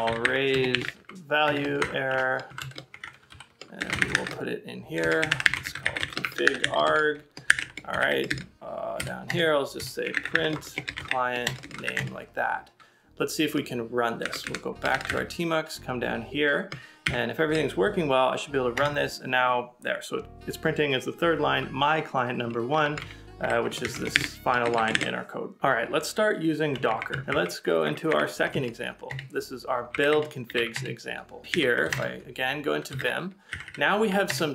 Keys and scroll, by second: 8.3 ctrl+c, 8.3-11.8 typing, 9.3 Return, 11.7 ctrl+c, 12.3 Return, 14.2 ctrl+a, 14.7-15.6 typing, 17.1 Up, 18.8 Return, 23.0 ctrl+a, 23.7-25.2 typing, 24.7 ctrl+c, 27.8 x, 28.8 c.